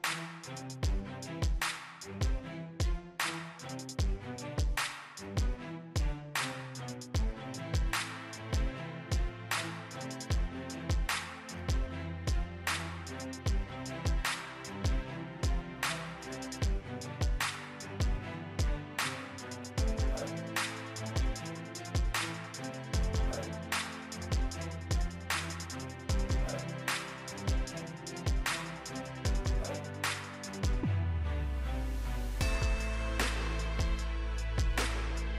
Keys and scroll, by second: 34.7 ctrl+d.